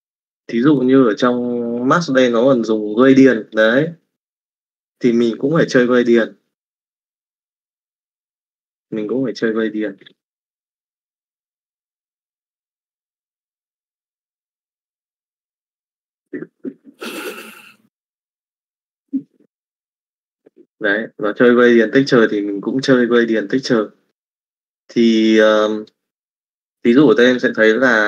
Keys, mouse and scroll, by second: 6.5 middle click, 7.3 middle click, 9.5 click, 14.8 middle click, 18.9 middle click, 19.8 middle click, 23.7 middle click, 24.5 middle click, 25.6 middle click.